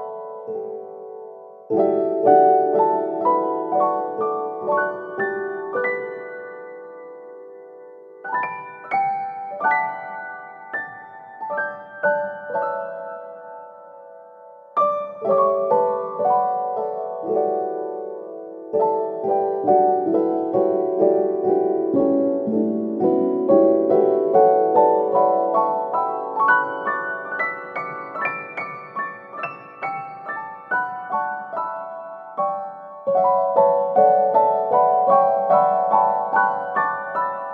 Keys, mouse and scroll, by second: 2.3 n, 4.2 shift+d, 11.1 Tab, 13.0-15.1 middle drag, 15.1 alt+z, 15.9 shift+middle click, 16.6-17.8 scroll up 8, 17.8 shift+middle click, 18.4-19.3 scroll up 3, 19.3-24.3 middle drag, 24.5-26.7 drag, 27.7-28.8 scroll down 6, 28.8-31.8 middle drag, 33.1 f, 34.3 scroll down 4, 34.5-35.9 middle drag, 35.9 Tab, 36.7-37.5 middle drag.